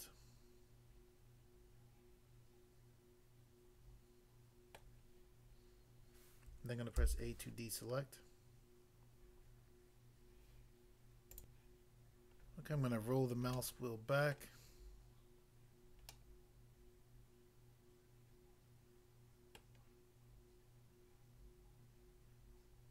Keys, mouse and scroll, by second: 4.8 middle click, 6.9 a, 11.3 click, 11.6 click, 12.3 scroll down 1, 12.9-13.5 scroll down 1, 13.5 middle click, 14.3 middle click, 16.1 middle click, 19.6 middle click.